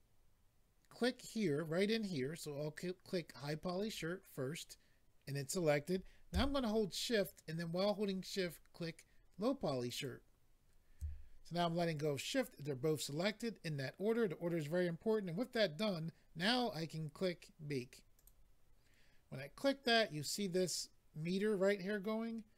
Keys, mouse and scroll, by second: 3.8 click, 9.9 shift+click, 18.1 click.